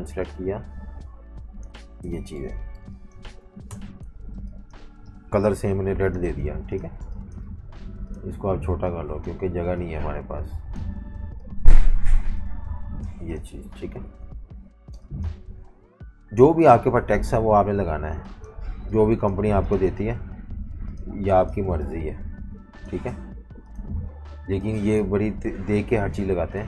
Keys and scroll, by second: 2.0 super+g, 2.3 v, 3.7 shift+super+], 4.2-7.1 typing, 14.0 super+-, 14.2 super+-, 14.8 typing.